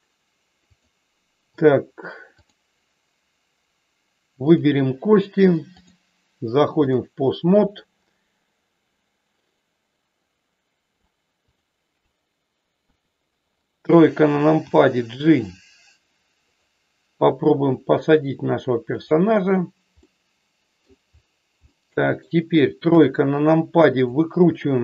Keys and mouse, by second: 2.3 click, 5.8-6.9 drag, 11.4 click, 12.8 KP_3, 14.7 g, 17.2 r, 18.9 click, 19.9 middle click, 21.7 middle click, 22.9 KP_3, 23.8 click.